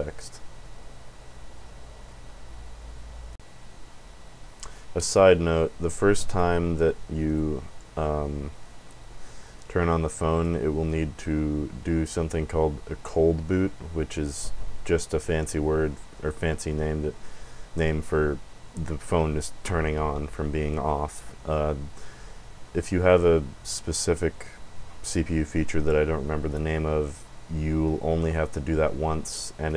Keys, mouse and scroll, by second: 5.8 click, 7.2 click, 9.6 click.